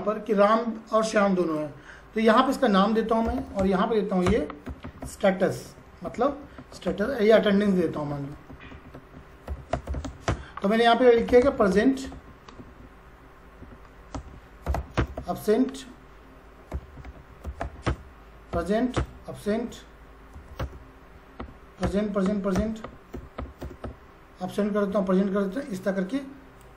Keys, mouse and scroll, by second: 1.4 click, 3.0-12.6 typing, 4.3 Return, 4.7 Up, 4.8 Right, 13.9-15.1 typing, 14.9 Return, 16.4-20.4 typing, 18.9 Return, 20.6 Return, 21.4 p, 21.8 Return, 22.6 Return, 22.8 p, 23.1 Return, 23.4 p, 23.6 Return, 23.8 p, 26.3-26.7 drag.